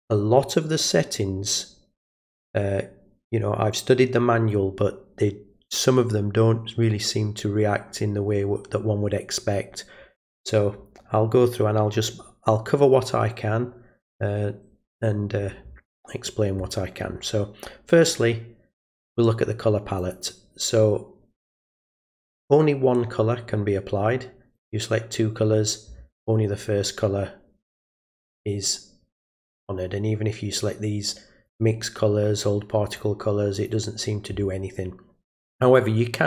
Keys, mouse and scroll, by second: 20.0 click, 21.8 click, 24.5 click, 27.9 click, 31.5 click, 32.9 click, 33.5 click, 35.6 click.